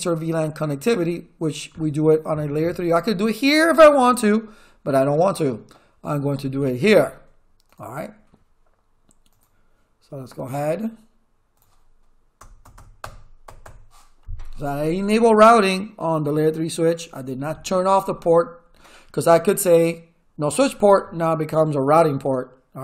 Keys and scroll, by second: 12.4 Return.